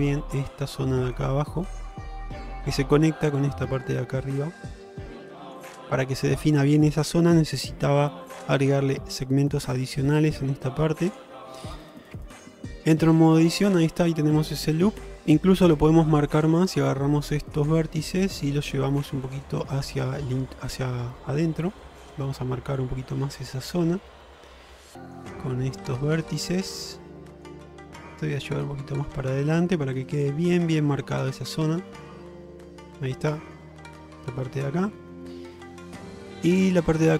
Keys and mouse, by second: 12.8 Tab, 13.5 middle click, 15.2-15.8 middle drag, 17.6 shift+click, 18.1-18.4 middle drag, 20.7 click, 22.0-23.8 drag, 24.1-25.2 middle drag, 25.5 middle click, 26.8 middle click, 27.2 middle click, 28.2 click, 29.3 middle click, 30.2 click, 31.0 Tab, 31.6-33.6 middle drag, 34.9-37.0 middle drag.